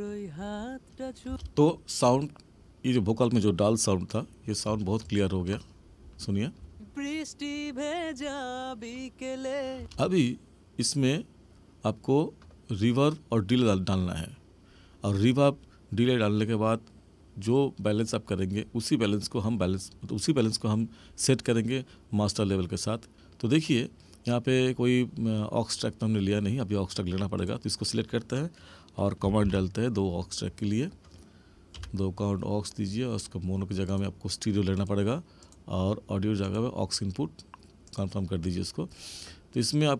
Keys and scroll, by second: 1.2 space, 6.5 space, 9.7 space, 29.4 ctrl+shift+n.